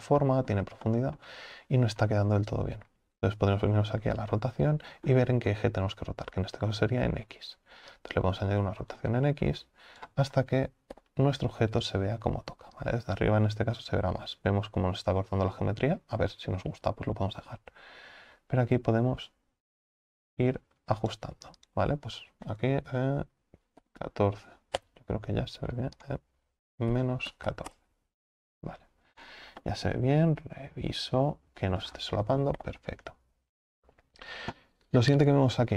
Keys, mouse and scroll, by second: 5.1-5.5 scroll down 2, 5.5-8.2 scroll up 2, 8.2-11.0 drag, 11.0 KP_7, 13.1-29.2 drag, 29.2-29.7 scroll up 7, 29.7-32.0 middle drag, 32.0 scroll down 5, 32.6 KP_7, 35.5-35.7 scroll down 4.